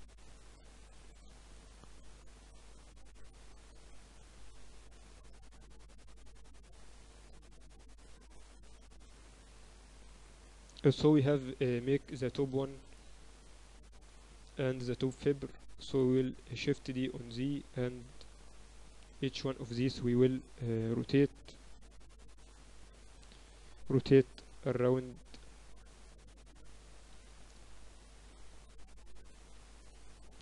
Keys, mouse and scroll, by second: 0.0-0.4 typing, 1.8 Tab, 2.1 a, 2.9 b, 5.2-7.2 drag, 7.2 a, 7.9 b, 9.5-12.1 drag, 10.1 z, 10.5 Tab, 11.7 g, 14.9-16.0 middle drag, 15.4 z, 16.0-17.9 drag, 17.4 shift+d, 19.7-21.6 right drag, 23.7-25.5 drag, 28.3 z, 29.8 ctrl+z.